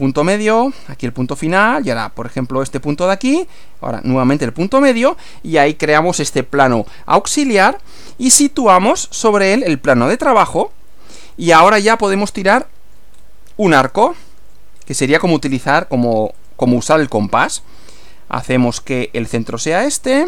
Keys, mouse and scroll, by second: 0.0 click, 1.1 click, 2.7 click, 4.5 click, 6.5-8.1 middle drag, 8.7 click, 10.1 click, 11.4-13.1 middle drag, 13.1 scroll down 1, 14.1-14.7 shift+middle drag, 14.7-15.2 shift+scroll up 1, 16.3 click, 19.4 click.